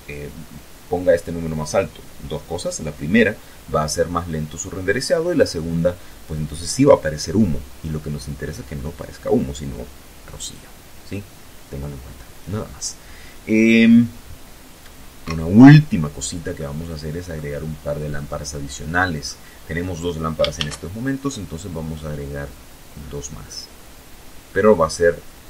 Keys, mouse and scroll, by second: 12.6 Escape, 13.4-13.8 scroll down 2, 13.9 middle click, 14.9 scroll down 2, 15.4-16.7 middle drag, 17.9 shift+a, 23.0 click, 24.2-25.4 middle drag.